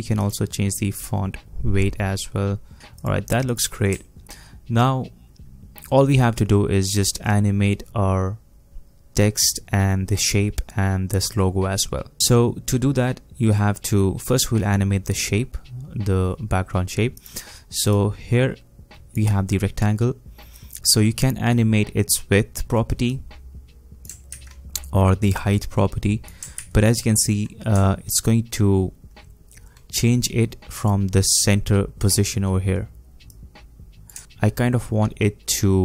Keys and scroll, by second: 24.3 ctrl+z, 26.6 ctrl+z, 27.7 ctrl+z, 34.2 ctrl+z.